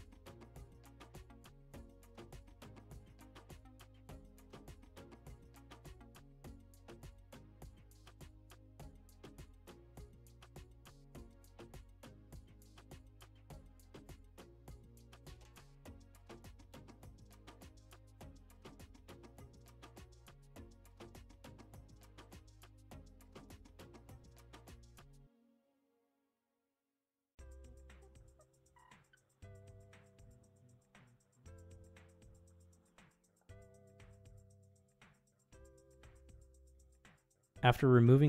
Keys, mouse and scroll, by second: 2.9 middle click, 3.7 alt+click, 4.3-5.7 middle drag, 6.2 ctrl+e, 8.3 middle click, 10.1 middle click, 10.5 click, 11.5 alt+click, 11.9 click, 11.9 middle click, 12.4 ctrl+e, 13.9 middle click, 14.7 middle click, 16.0 middle click, 16.9 ctrl+e, 18.8 click, 19.5 click, 20.1 middle click, 20.8 middle click, 21.7-22.8 middle drag, 23.5 middle click, 24.6 alt+shift+click, 26.2 ctrl+e, 27.1 middle click, 28.3 middle click, 29.1 middle click, 30.5 click, 30.9 ctrl+Tab, 32.7 Tab, 33.9 alt+click, 35.1 ctrl+e, 37.3 middle click, 38.0 middle click.